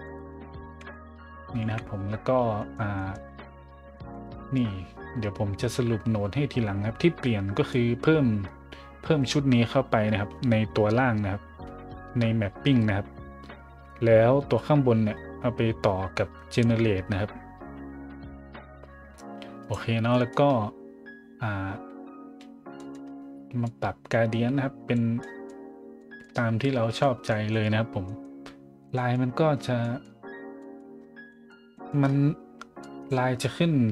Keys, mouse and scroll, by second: 0.0 right click, 1.6 KP_Decimal, 2.3-2.7 scroll up 2, 2.9 middle click, 3.3 middle click, 3.6 middle click, 3.9 middle click, 7.7-19.7 drag, 20.1 middle click, 20.5 middle click, 22.8 middle click, 23.1 scroll up 1, 23.6 click, 25.2 scroll down 1, 26.0 middle drag, 26.7 a, 27.0 middle drag, 27.5 middle drag, 28.0 middle drag, 28.9 middle click, 29.5 middle click, 29.8 middle drag, 30.6 middle drag, 30.9-31.3 middle drag, 31.3-32.4 scroll up 3, 32.8 click, 33.4-33.9 drag.